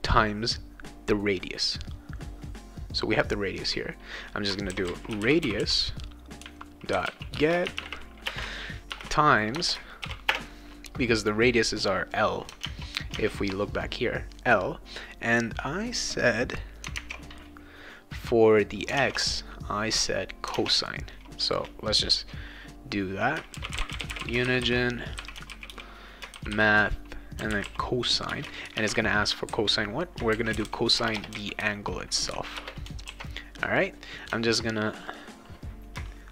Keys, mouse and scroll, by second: 4.4-8.3 typing, 9.5 BackSpace, 10.0 shift+8, 10.3 space, 12.6 alt+Tab, 13.1 alt+Tab, 17.0 alt+Tab, 23.3-31.6 typing, 28.3 Return, 32.5 Return, 33.1 ctrl+s, 33.8 click, 35.1 click.